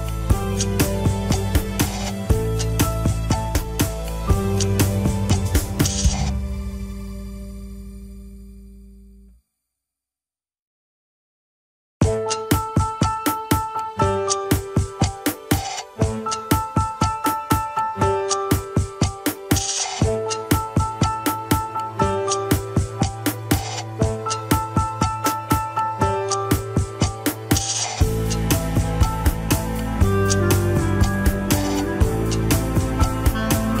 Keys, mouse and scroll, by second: 0.9 click, 1.2 g, 2.2 click, 2.5 g, 3.7 click, 3.9 g, 4.7 click, 6.3-7.2 scroll down 1, 7.2 g, 8.3 KP_1, 9.0 alt+z, 10.1 alt+z, 10.5 KP_3, 10.7 scroll up 2, 11.0 g, 12.0 click, 12.3 g, 13.7 click, 13.9 g, 15.3 click, 15.5 g, 16.1 click, 16.2 g, 16.7 KP_1, 16.8 scroll down 2, 17.1 ctrl+Tab, 17.6 click, 19.1 click, 19.8 scroll down 2, 20.1-21.8 shift+middle drag, 21.8 ctrl+Tab, 22.0 alt+z, 22.3 shift+middle drag, 22.5 scroll up 1, 23.1 ctrl+s, 23.3 click, 23.5-24.2 scroll down 2, 25.5 click, 25.7 right click, 27.7-31.2 drag, 32.8-33.8 middle drag.